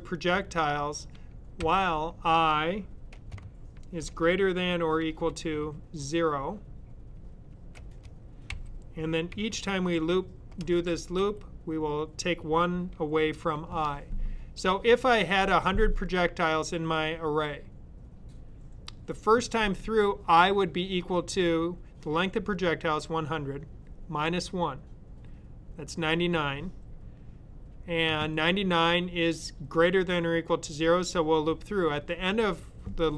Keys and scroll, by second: 1.6 i, 3.2-5.3 typing, 7.4-11.0 typing, 13.2-14.0 typing.